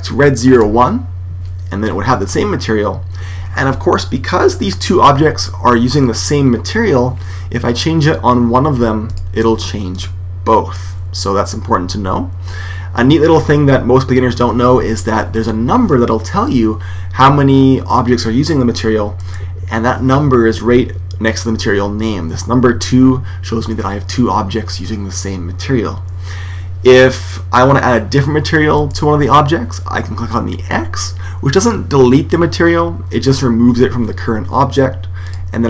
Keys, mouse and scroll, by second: 9.0-10.7 drag, 19.1-20.8 right drag, 28.7 right click, 35.2-35.6 drag.